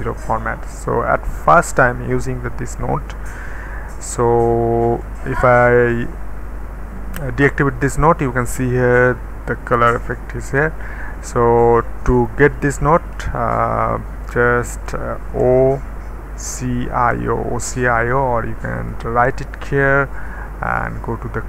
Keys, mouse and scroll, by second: 0.0-1.7 middle drag, 1.7 click, 5.0 d, 10.1 d, 11.7-13.2 middle drag, 13.2 Tab, 15.4 o, 16.4-17.1 typing, 18.4 Escape, 19.4 right click.